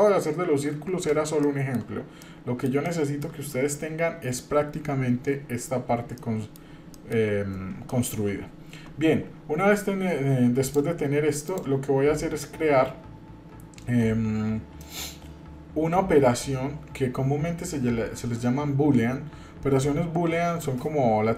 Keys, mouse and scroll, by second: 1.4-1.7 shift+middle drag, 1.8 scroll down 1, 2.2 middle click, 2.8-3.3 shift+middle drag, 6.1 middle click, 6.1-6.5 scroll down 1, 6.9 shift+middle click, 7.5 scroll up 1, 7.9 shift+middle click, 10.6 click, 11.4 click.